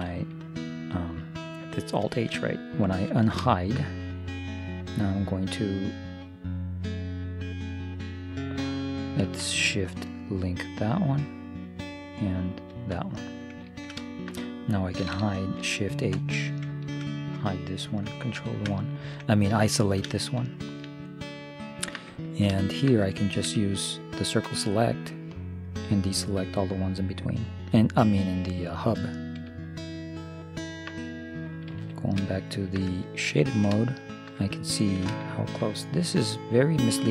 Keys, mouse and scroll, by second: 2.3 alt+h, 3.1-7.4 middle drag, 10.9 shift+l, 12.6 shift+l, 13.7-16.0 middle drag, 16.2 shift+h, 18.4 ctrl+KP_1, 23.4 middle click, 23.4 c, 24.4-29.6 drag, 29.6-30.8 middle drag, 31.8 z, 36.9 middle click.